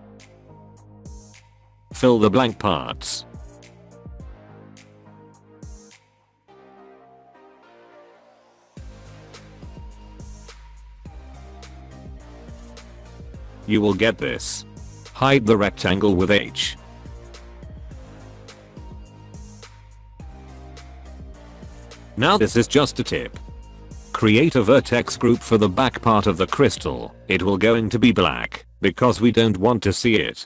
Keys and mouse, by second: 0.3 f, 0.5 click, 1.0 click, 1.1 middle click, 1.6 shift+click, 1.9 f, 2.7 shift+click, 3.1 shift+click, 3.4 f, 3.8 middle click, 4.9 click, 5.5 click, 6.7 f, 7.1 click, 8.0 middle click, 8.4 shift+click, 8.7 f, 9.0 middle click, 9.8 shift+click, 10.4 middle click, 10.9 shift+click, 11.2 f, 11.5 middle click, 11.6 Tab, 11.8 alt+a, 11.9-12.9 middle drag, 15.2 h, 17.2-17.6 middle drag, 17.9 middle click, 18.7 middle drag, 19.5 click, 20.1 h, 20.4 middle click, 20.6 alt+middle click, 20.8 alt+middle click, 22.2-22.7 middle drag, 22.7 click, 23.3 Tab, 27.8 click, 29.7-30.4 drag.